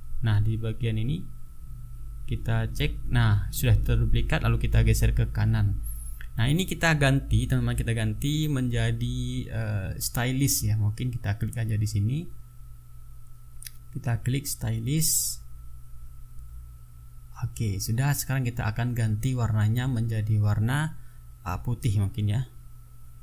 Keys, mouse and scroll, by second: 2.3 ctrl+shift+d, 4.4-7.7 drag, 8.6 click, 9.6 click, 12.1 ctrl+a, 13.9-16.5 typing, 19.4 click.